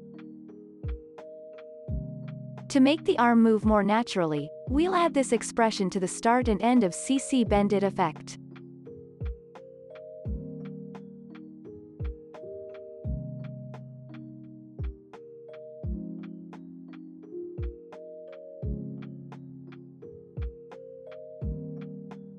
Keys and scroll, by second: 13.6 Return, 22.2 ctrl+v.